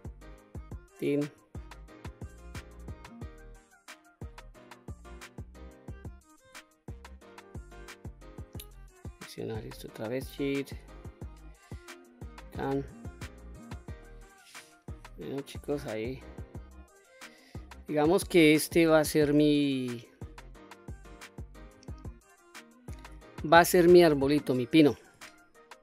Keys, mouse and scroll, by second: 0.1 alt+click, 1.4-3.8 drag, 4.1 middle click, 5.1 click, 6.0 s, 6.9 click, 8.5 click, 9.7 alt+click, 10.8 s, 11.8 click, 12.2-12.6 scroll down 2, 12.6-14.3 middle drag, 14.6-15.1 scroll down 2, 15.1-16.6 middle drag, 17.2 scroll down 1, 17.6-18.3 scroll up 3, 18.3-19.0 scroll down 1, 19.0 middle click, 20.5 click, 21.8 alt+click, 22.8 scroll down 1, 22.9-23.9 middle drag, 24.7 s.